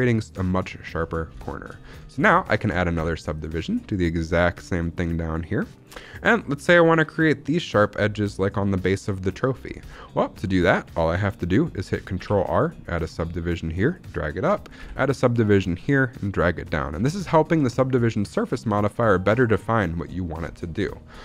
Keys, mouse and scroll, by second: 0.8-1.3 scroll down 3, 1.3 shift+middle click, 1.9-2.4 scroll up 3, 2.0 shift+middle click, 2.8 ctrl+r, 5.7 click, 6.3 middle click, 6.7-7.7 scroll up 1, 7.7-8.7 scroll up 1, 8.8 middle click, 9.6 scroll down 1, 9.8 shift+middle click, 10.1-10.7 scroll up 3, 10.3 shift+middle click, 12.1 ctrl+r, 13.8 click, 14.7 ctrl+r, 16.8 click, 17.0 shift+middle click, 17.2 scroll up 1, 17.6 shift+middle click, 17.8-18.4 scroll up 1, 18.4 z, 18.9-20.3 scroll up 2, 20.3-21.2 scroll down 5, 20.8 shift+middle click.